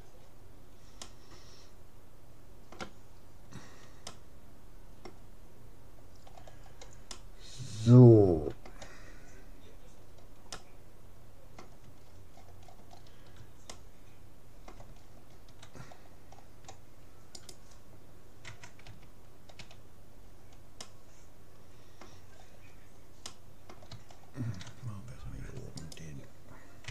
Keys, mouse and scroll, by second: 1.0-2.8 middle drag, 3.8-5.8 middle drag, 6.4-7.0 scroll up 1, 7.0-8.8 middle drag, 9.7-15.6 middle drag, 15.6-16.0 scroll down 1, 16.0-17.4 middle drag, 17.4-19.0 right drag, 18.5 Tab, 19.0 a, 19.6 a, 20.2-23.2 middle drag, 25.8-26.9 right drag.